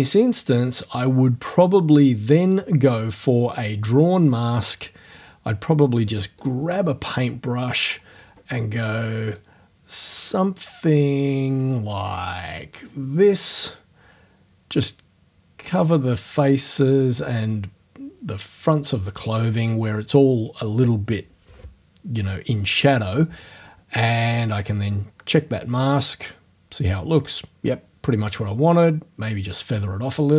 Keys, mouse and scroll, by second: 0.5 scroll down 2, 3.6 click, 4.7-5.1 scroll down 2, 6.4 click, 7.7-8.3 scroll up 2, 8.3 scroll up 1, 9.4-19.4 drag, 24.5 scroll down 2, 25.0-25.4 scroll down 2, 25.8 click, 28.8-30.3 drag.